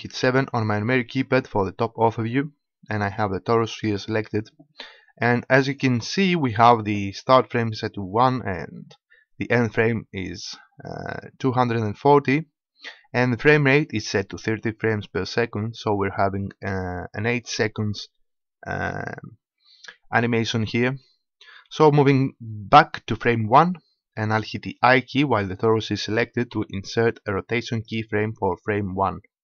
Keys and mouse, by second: 0.3 KP_7, 5.7-18.2 drag, 23.2-26.6 drag, 26.6 i.